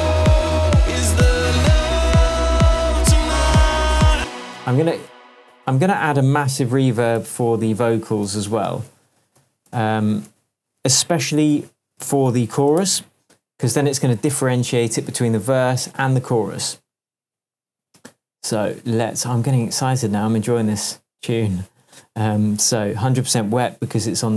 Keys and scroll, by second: 4.1 space, 4.7 Tab, 7.1 alt+super+t, 8.2 alt+super+r, 8.6 shift+super+v, 9.3-13.0 typing, 13.7 Return.